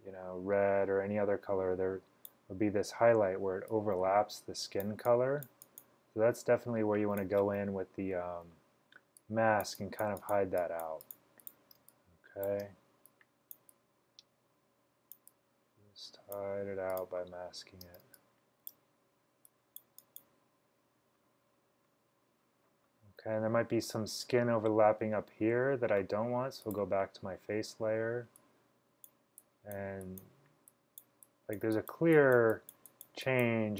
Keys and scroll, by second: 11.9 space, 12.4 space, 17.1-18.8 typing.